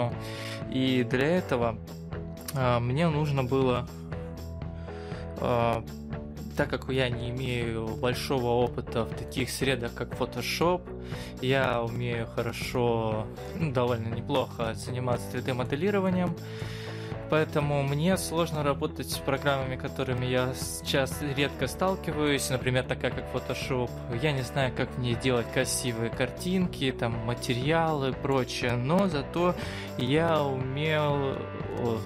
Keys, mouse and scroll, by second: 9.2 middle click, 11.3-12.3 scroll down 4, 12.3-12.7 scroll down 3, 13.1 scroll up 1, 13.3 middle click, 15.1 middle click, 16.0 middle click, 16.9-18.0 scroll up 1, 19.2 middle click, 25.7 middle click.